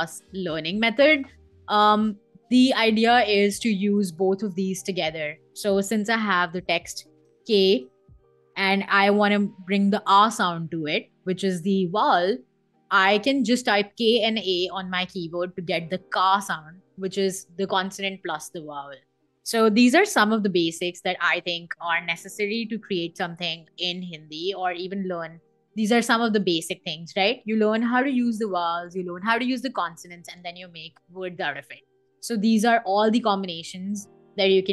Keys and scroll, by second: 5.6 t, 7.2 k, 8.8 a, 11.5 Escape, 23.2 n, 23.9 a, 24.6 Escape.